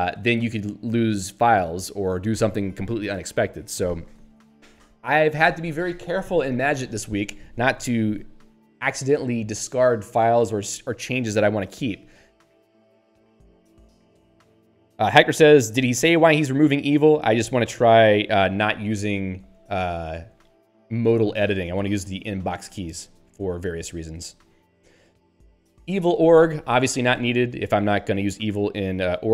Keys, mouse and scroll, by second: 22.1 click, 22.6 Down, 26.3 Right, 26.8 Up, 27.6 Down.